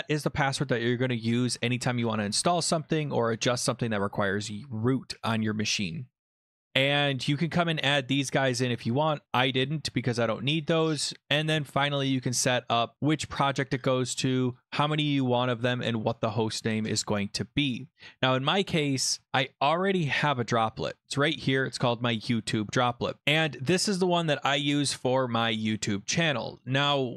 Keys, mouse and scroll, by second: 6.0-6.5 scroll, 9.3 scroll, 9.8 scroll, 9.9-10.2 scroll down 7, 16.1 click, 17.9 click, 19.7 click, 21.4 click.